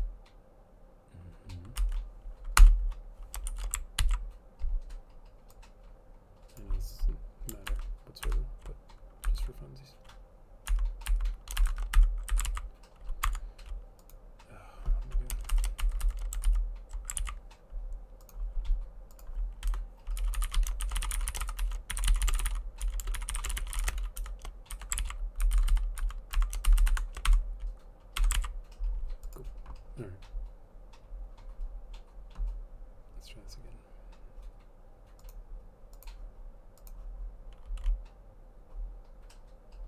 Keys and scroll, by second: 1.9 Down, 2.7 Return, 3.6 shift+;, 4.1 ctrl+s, 7.8 alt+Up, 8.4 alt+Up, 9.3 Right, 11.7 Up, 11.8 shift+Right, 12.0 Delete, 12.4 Delete, 12.6 ctrl+s, 13.3 Tab, 15.6 Down, 16.1 shift+Down, 17.3 ctrl+s, 19.8 Return, 20.0-24.9 typing, 25.1 ctrl+s, 25.5 Right, 25.6 Down, 25.8 Down, 25.9-28.3 typing, 28.5 ctrl+s.